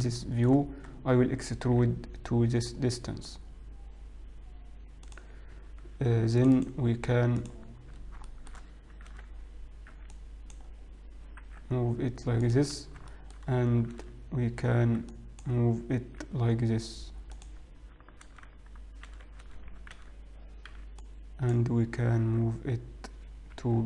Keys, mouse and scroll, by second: 0.5 shift+middle click, 1.0-2.9 scroll up 2, 2.9 e, 6.5 ctrl+r, 8.0 click, 8.0-8.8 scroll up 2, 8.8 shift+middle click, 9.4 alt+a, 10.0 b, 12.0 g, 13.3 shift+middle click, 13.3-13.9 scroll down 2, 14.0 alt+a, 14.9 b, 17.3 g, 18.3 alt+a, 19.1 a, 19.6 a, 20.9 b, 22.3 g.